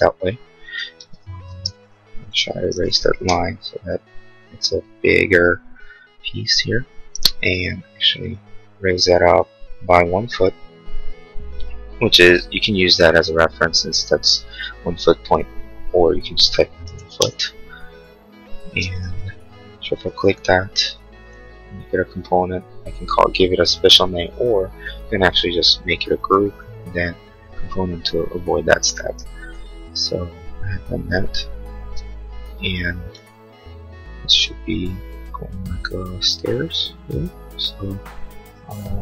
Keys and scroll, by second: 1.0 ctrl+z, 1.6 space, 3.3 Delete, 16.6-17.5 typing, 18.8 space, 33.1 m.